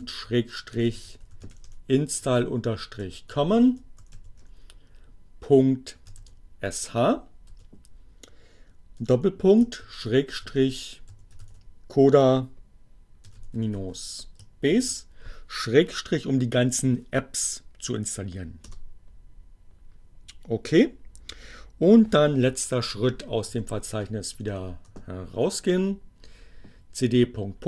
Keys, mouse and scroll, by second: 0.0-5.4 typing, 7.2 space, 7.5 ., 9.9-14.8 typing, 17.5 Return, 22.5-24.0 typing, 25.0 Return.